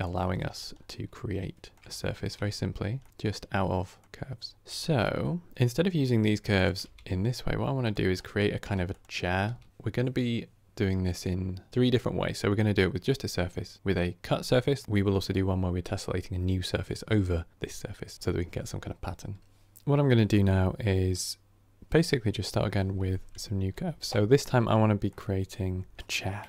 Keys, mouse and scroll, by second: 0.6 scroll down 2, 0.8-2.7 middle drag, 2.7 Tab, 2.9-4.6 middle drag, 4.6 shift+Left, 6.4 click, 6.7 g, 8.0-8.5 drag, 8.5 g, 9.0 click, 9.3 g, 19.4-24.6 drag, 24.6-25.0 scroll down 4, 25.0-25.5 middle drag, 25.5 KP_1, 26.0 KP_3.